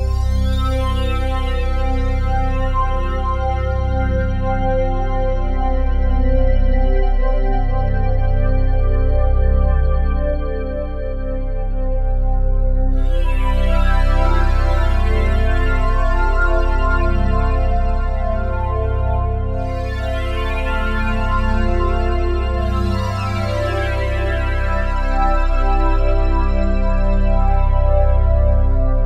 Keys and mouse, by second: 1.5-5.4 drag, 5.4 ctrl+s, 8.0-11.1 drag, 12.3 1, 14.5-21.7 alt+drag, 21.8 ctrl+alt+click, 22.1 ctrl+alt+click, 22.4 ctrl+alt+click, 22.9 alt+click, 23.8 click, 25.0 s, 26.1 click, 26.8 typing, 27.9 typing.